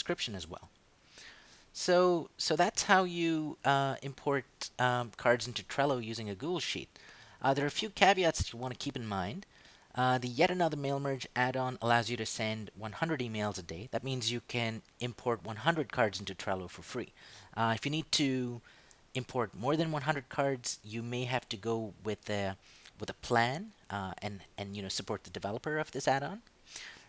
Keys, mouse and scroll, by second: 1.9 click, 8.2 click.